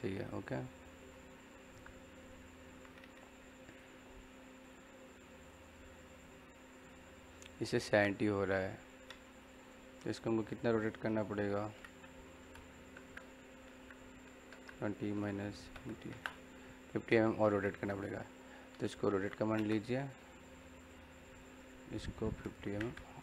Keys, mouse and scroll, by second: 0.0 click, 0.8 middle click, 3.6 click, 9.2 click, 11.3-12.3 typing, 17.2 click, 18.4-19.5 typing, 20.7 click.